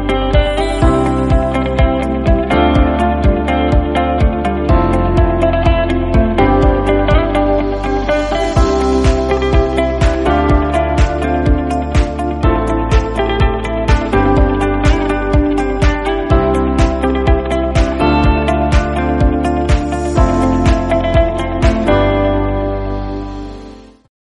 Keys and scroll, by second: 0.8 ctrl+u, 3.6 ctrl+j, 4.0 ctrl+u.